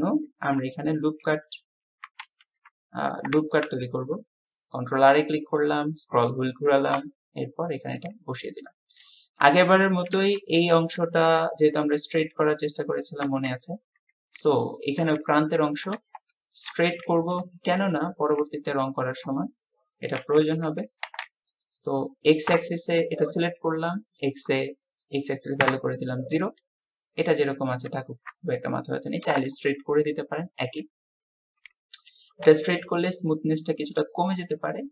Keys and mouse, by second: 3.6 ctrl+r, 16.4 shift+drag, 17.7-18.4 shift+drag, 28.7-29.3 middle drag, 29.3-29.7 drag, 29.9 KP_1, 32.6-33.1 shift+drag, 34.3-34.9 drag, 34.8 typing.